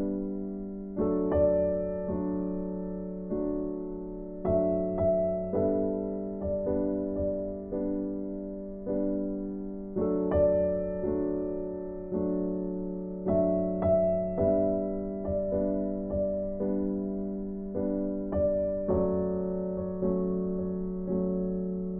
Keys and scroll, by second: 6.8 ctrl+z.